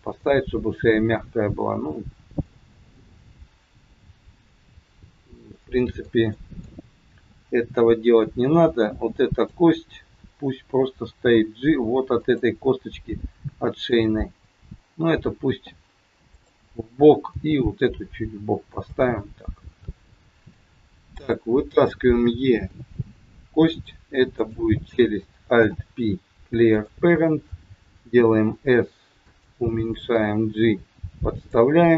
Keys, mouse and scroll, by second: 0.2 middle click, 5.5 middle click, 6.3 middle click, 7.1 KP_3, 8.8 click, 11.0 g, 13.8 click, 16.3 click, 17.2 g, 19.9 scroll up 4, 21.2 click, 22.6 e, 24.3 click, 25.5 alt+p, 28.2 s, 30.0 g.